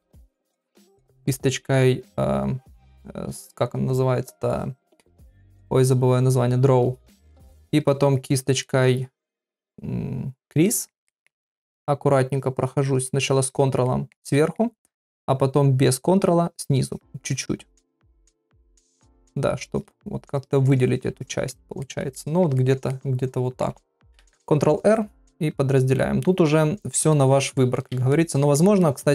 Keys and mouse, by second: 0.2 click, 0.5 click, 1.0 click, 8.6 middle click, 10.7 middle click, 11.1 ctrl+middle click, 11.4 middle click, 12.4 ctrl+click, 12.6 ctrl+click, 12.9 ctrl+click, 13.2 ctrl+click, 13.5 ctrl+click, 13.9 middle click, 14.4 middle click, 15.8 click, 16.2 click, 16.9 click, 17.3 click, 17.6 click, 18.0 click, 18.2 click, 19.0 ctrl+click, 19.2 ctrl+click, 19.7 ctrl+click, 20.4 click, 20.6 click, 21.2 ctrl+click, 21.5 ctrl+middle click, 22.1 middle click, 22.6 ctrl+middle click, 22.9 middle click, 26.9 ctrl+r, 27.2 middle click, 28.1 ctrl+middle click, 28.6 ctrl+middle click.